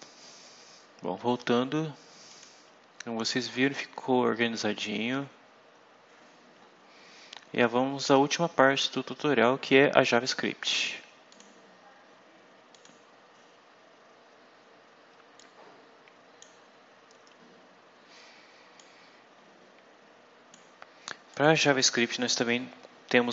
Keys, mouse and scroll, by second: 0.3 scroll up 2, 2.2 click, 3.2-3.5 scroll up 2, 4.3-6.7 scroll down 12, 7.5-8.8 scroll up 6, 11.2 click, 12.6 click, 15.3-16.5 drag, 18.7-20.6 drag, 21.2 click.